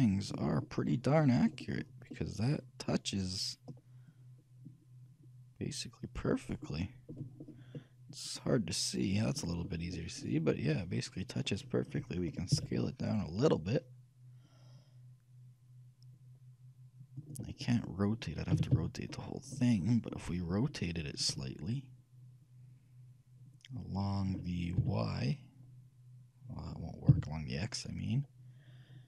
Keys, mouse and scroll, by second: 0.9 middle click, 1.2 middle click, 1.3-2.3 scroll up 1, 2.3-4.3 middle drag, 7.3-8.0 scroll down 1, 8.0-9.5 middle drag, 9.9-11.8 scroll up 1, 11.8-12.7 scroll down 1, 12.7 middle click, 12.7 s, 17.6-22.1 middle drag, 18.7 a, 18.9 a, 21.4 r.